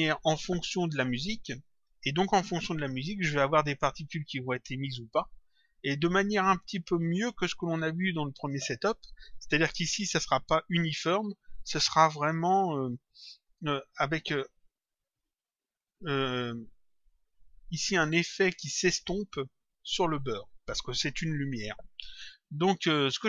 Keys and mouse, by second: 4.7 click, 17.9 click.